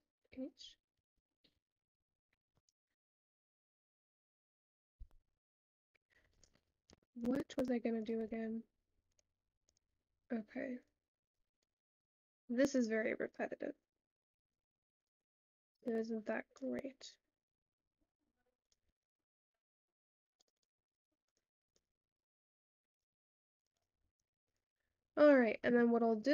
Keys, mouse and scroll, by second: 7.2-13.9 drag, 19.4-26.3 drag.